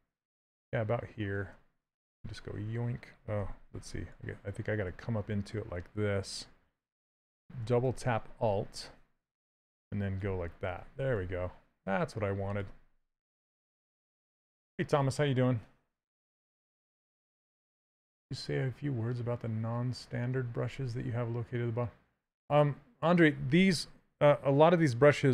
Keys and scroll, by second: 5.5 shift+space.